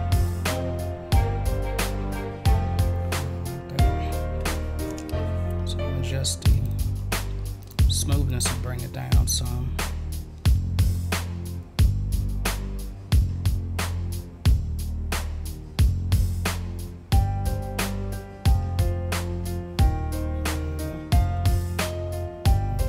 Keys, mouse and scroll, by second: 4.4 ctrl+z, 6.5 click, 6.7 click, 7.6 click, 8.2 click, 11.5-19.4 drag, 22.5-22.8 drag.